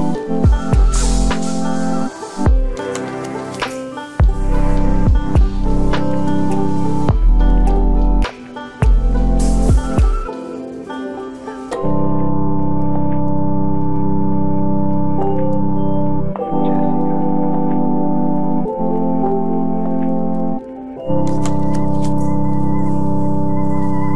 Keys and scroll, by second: 7.2 ctrl+l, 18.2 ctrl+t.